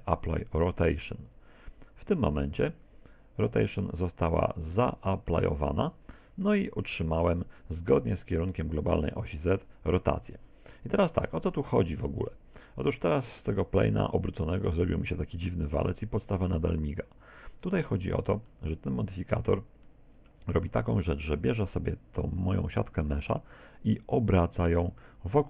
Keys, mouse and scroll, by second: 3.8 middle click, 5.8-6.6 scroll up 5, 6.6 shift+middle click, 11.4 z, 12.6 middle click, 17.3 click, 18.5 middle click, 19.5 Tab, 19.9 middle click, 20.5 z, 20.7 middle click.